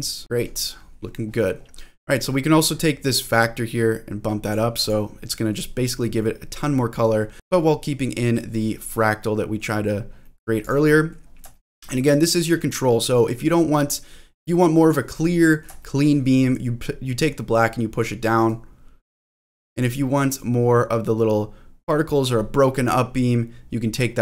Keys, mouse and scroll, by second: 0.2-0.7 scroll up 2, 0.7-1.6 scroll down 4, 1.6-3.3 scroll up 3, 3.3-4.5 drag, 4.8 click, 5.2 middle click, 6.0 middle click, 6.5-7.3 scroll up 4, 7.3 click, 7.3-7.8 scroll down 3, 7.8 middle click, 8.6 scroll up 2, 8.9 scroll down 2, 9.2 middle click, 9.8-10.2 scroll down 1, 10.2 middle click, 10.6 click, 10.9 middle click, 11.5 shift+middle click, 11.8 middle click, 13.3-14.8 drag, 15.2 middle click, 15.8 shift+middle click, 16.1 scroll up 1, 18.5-19.8 drag, 20.4-22.2 drag, 22.6 middle click, 23.0-23.4 scroll up 3, 24.1 click.